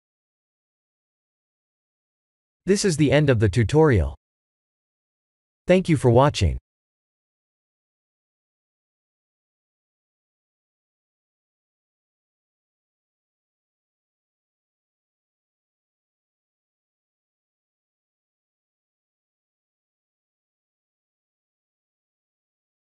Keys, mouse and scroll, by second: 0.2 click, 0.3-2.6 typing, 1.4 click, 2.0 click, 3.3 Tab, 3.9 click, 4.5-8.1 alt+middle drag, 9.2-12.9 alt+middle drag, 16.0 KP_1.